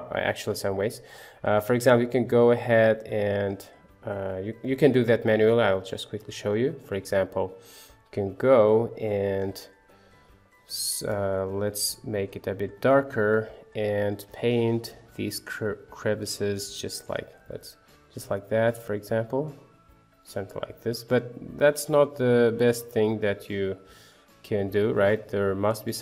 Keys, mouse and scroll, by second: 6.6 click, 7.5 middle click, 8.8 click, 9.5-12.3 middle drag, 12.3-13.9 drag, 15.7 middle click, 16.5 middle click, 18.3-23.0 drag, 23.3-25.1 middle drag.